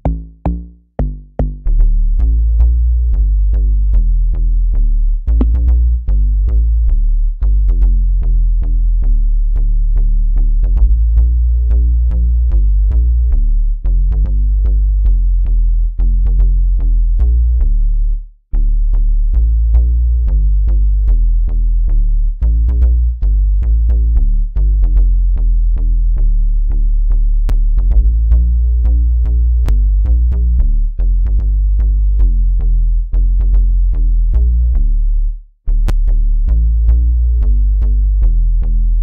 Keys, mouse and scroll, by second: 9.0 click, 27.4 F6.